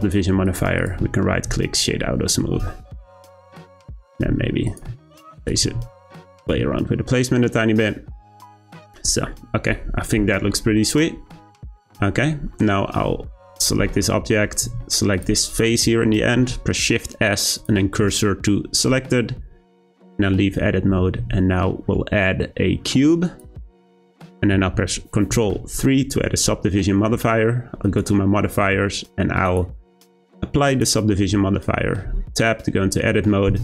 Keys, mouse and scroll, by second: 0.8 click, 1.9-2.7 scroll down 2, 2.7-3.2 shift+middle drag, 3.2-3.7 scroll up 2, 3.7 click, 4.3 s, 4.9 g, 5.6 r, 6.6 g, 8.6 click, 9.0-11.8 scroll down 2, 11.8 click, 12.5-13.0 middle drag, 13.0-13.5 scroll up 3, 13.5 Tab, 13.8 shift+middle click, 14.1-14.6 scroll up 3, 15.1 click, 16.3 shift+s, 20.0 Tab, 20.4-21.2 scroll down 1, 21.2 shift+a, 25.3 ctrl+3, 27.8 click, 29.4-32.0 drag, 32.0 Tab, 33.5 s.